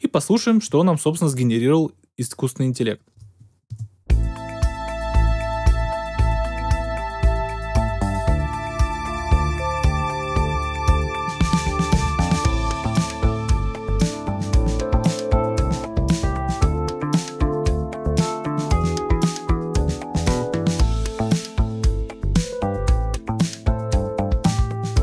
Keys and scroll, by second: 3.1 Return, 3.6 space.